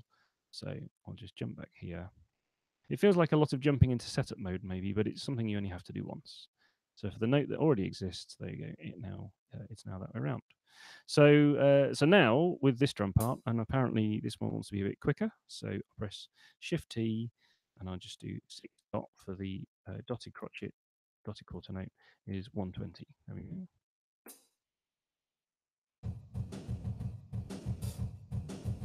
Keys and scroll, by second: 7.7 super+2, 14.3 shift+t, 18.4 6, 20.5-21.6 typing, 25.0 p.